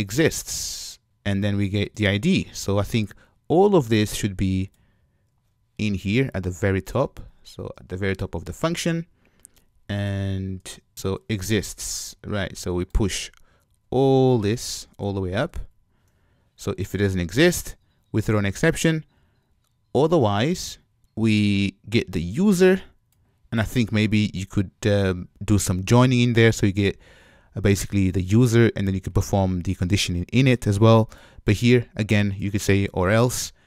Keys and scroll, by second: 5.3 super+x, 10.2 super+v, 14.3 alt+shift+Up.